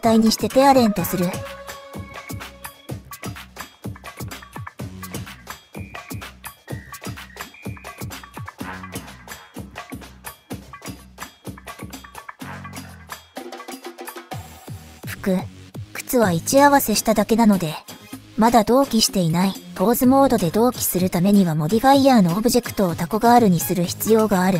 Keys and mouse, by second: 0.0 ctrl+p, 1.1 middle click, 1.1 typing, 3.0 click, 3.7 click, 4.7 ctrl+z, 7.7 middle click, 9.4 click, 10.1 click, 10.9 click, 11.8 middle click, 12.9 click, 13.4 click, 14.2-15.4 drag, 15.6 ctrl+z, 16.5 shift+middle click, 17.0 middle click, 17.3 click, 17.8-19.3 drag, 19.4 ctrl+z, 19.9 shift+middle click, 20.7 click, 21.4 click, 21.6-22.8 drag, 23.0 ctrl+z, 24.1 shift+middle click, 24.3 middle click.